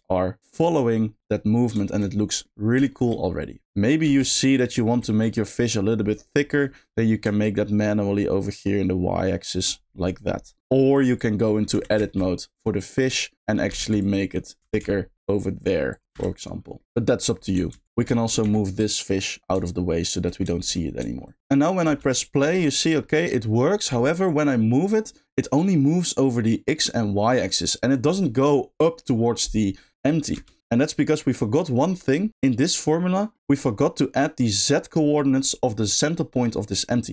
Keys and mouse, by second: 0.4 middle click, 1.9 middle click, 2.1 middle click, 2.9 shift+middle click, 4.0 space, 4.3 middle click, 4.8 shift+middle click, 5.2 middle click, 6.3 middle click, 7.5-9.6 shift+drag, 10.5 middle click, 10.8 shift+middle click, 11.4 middle click, 12.2 middle click, 12.5 middle click, 13.1 click, 13.9 alt+z, 14.0 click, 15.9 click, 16.8 middle click, 18.2 shift+middle click, 18.4 g, 19.2 click, 20.7 middle click, 21.8 space, 22.2 middle drag, 22.5 middle click, 22.9 middle click, 23.9 g, 27.9-30.3 drag, 30.3 space, 32.0 middle click, 36.8 middle click.